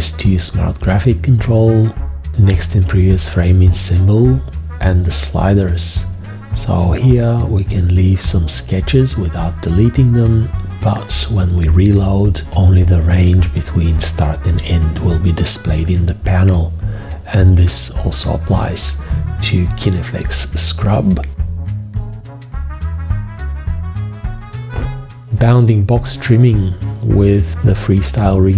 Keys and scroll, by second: 17.7 g, 19.2 v.